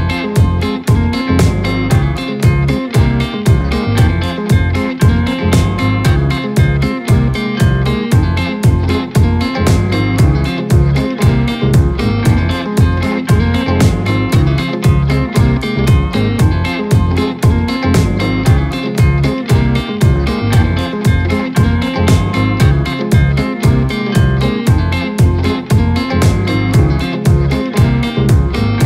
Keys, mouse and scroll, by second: 0.3-0.7 shift+middle drag, 0.7-1.3 scroll up 1, 1.3 click, 1.8-2.5 scroll up 2, 2.9 g, 6.4-6.7 scroll down 1, 6.7-8.7 middle drag, 9.1 z, 10.7 scroll down 1, 11.0 middle click, 11.3 click, 11.6-12.0 scroll up 3, 12.0-13.1 middle drag, 13.1-14.0 scroll down 1, 14.0 scroll up 1, 14.3-15.7 middle drag, 15.7 KP_3, 16.4-16.7 scroll up 1, 16.7 scroll down 1, 17.8 click, 19.4 click, 20.2 shift+a, 23.2-27.4 drag, 28.1-28.8 drag.